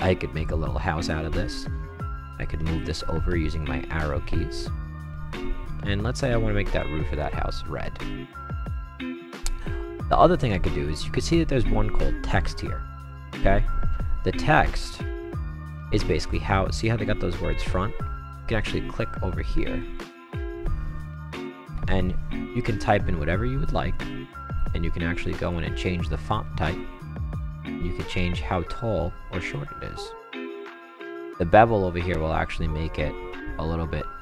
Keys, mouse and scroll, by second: 0.3 click, 2.0 Right, 2.2 Right, 2.5 Left, 3.7 Right, 4.2 Left, 4.7 Right, 5.8 click, 6.7 click, 7.1 click, 7.5-9.0 right drag, 13.2-15.2 drag, 18.2 click, 21.2 t, 21.5 s, 23.9 click, 25.3 click, 27.4-31.3 drag, 32.0-34.2 drag.